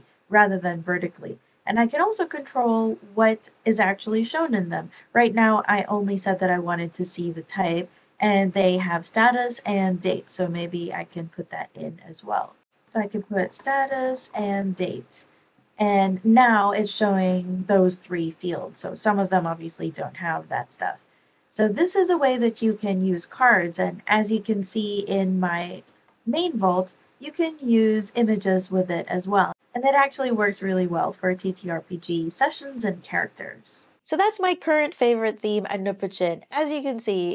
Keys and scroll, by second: 12.6-15.0 typing, 25.5 ctrl+alt+Right, 25.7 ctrl+alt+Right, 25.8 ctrl+alt+Return.